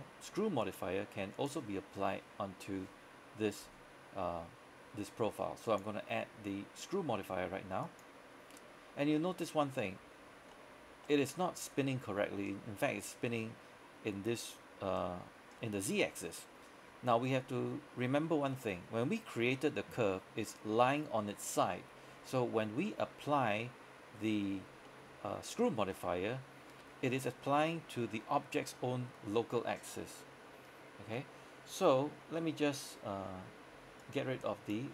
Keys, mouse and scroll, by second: 9.0 scroll down 1, 9.3 middle click, 10.3 scroll up 1, 10.6-16.4 middle drag, 18.3 scroll down 1, 18.6 middle click, 18.9-19.9 scroll up 1, 24.9 middle click, 25.3-25.8 scroll down 1, 26.0 middle click, 32.1 middle click, 34.1 click.